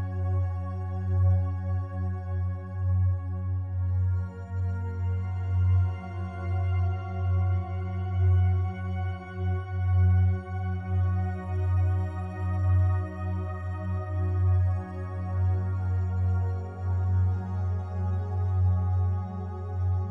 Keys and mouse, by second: 0.5 click, 0.9 click, 1.3 click, 1.7 click, 2.3 click, 2.7 click, 3.0 click, 3.8 ctrl+alt+click, 4.2 ctrl+alt+click, 4.5 ctrl+alt+click, 4.9 ctrl+alt+click, 5.9 alt+click, 6.7-8.7 alt+drag, 9.0 ctrl+alt+click, 9.7 alt+shift+click, 10.1 ctrl+alt+click, 10.6 typing, 11.0 click, 12.9-13.6 typing, 14.3 click, 14.8 click, 15.9 click, 16.4 alt+click, 17.4 click, 18.4 click, 19.1 click, 19.5 alt+click.